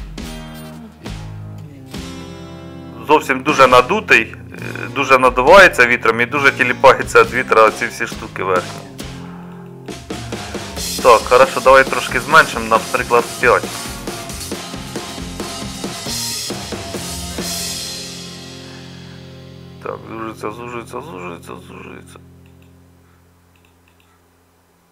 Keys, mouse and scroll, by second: 6.9-24.9 middle drag.